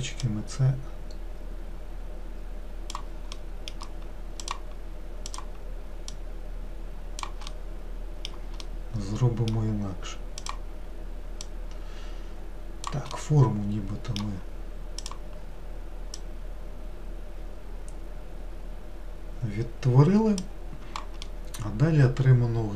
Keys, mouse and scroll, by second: 0.2 click, 3.4-4.5 middle drag, 4.5 click, 5.3 click, 6.2 click, 7.5-10.4 middle drag, 10.4 click, 11.5 click, 13.2-15.1 middle drag, 15.1-16.9 drag, 21.3-22.7 middle drag.